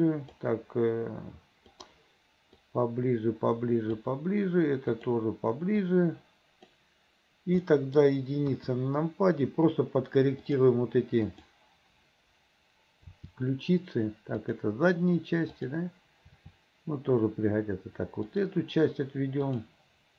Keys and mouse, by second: 1.9 click, 2.8-4.1 drag, 5.1 click, 5.9-6.9 drag, 7.9 middle click, 8.6 KP_1, 10.5 click, 11.5 click, 13.2 r, 16.4 r.